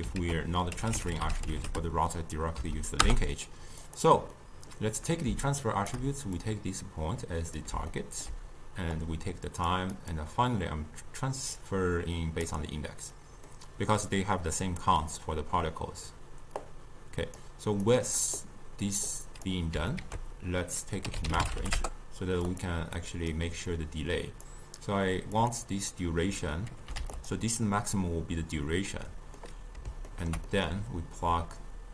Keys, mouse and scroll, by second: 0.3 ctrl+a, 4.4-5.7 middle drag, 5.7 shift+right click, 6.4-8.0 drag, 8.0-9.0 ctrl+middle drag, 9.0-13.1 drag, 13.6-16.7 middle drag, 16.7 click, 17.9 click, 19.1 click, 20.1 ctrl+a, 23.1 click, 23.8-27.3 drag, 29.4-31.9 middle drag.